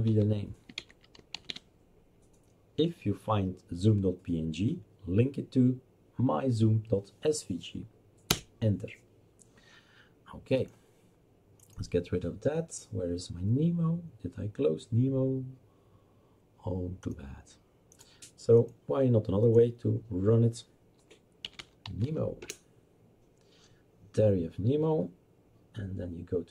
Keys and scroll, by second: 0.0-1.9 typing, 8.3 Return, 21.2-22.5 typing.